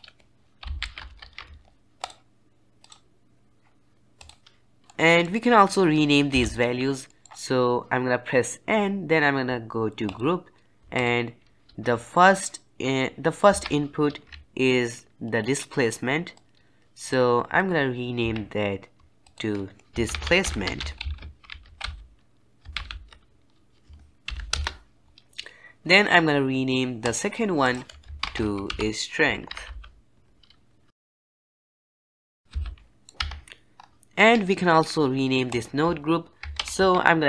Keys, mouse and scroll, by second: 4.8-6.2 middle drag, 6.2 n, 7.0-10.0 middle drag, 10.0 click, 10.9 click, 13.4 Tab, 15.1 ctrl+right click, 16.3-17.6 drag, 18.1 Tab, 19.1-20.1 drag, 26.9 click, 27.5 click, 32.4 n, 32.9 middle click, 33.1 Tab, 33.7-35.4 scroll up 3, 35.4-36.7 drag.